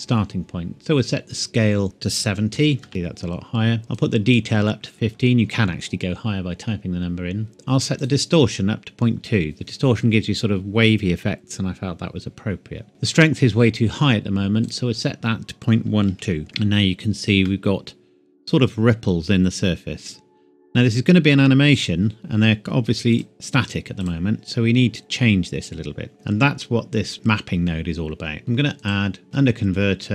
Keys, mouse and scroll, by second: 1.8 click, 2.2 KP_7, 2.8 KP_0, 3.9 click, 4.3 click, 7.5 click, 14.6 click, 16.0 KP_Decimal, 16.2 KP_1, 16.4-16.9 scroll up 1, 17.4 middle click, 19.0-19.3 scroll up 1, 21.7 click, 25.9-27.1 scroll down 1, 27.1 scroll up 1, 28.8 click.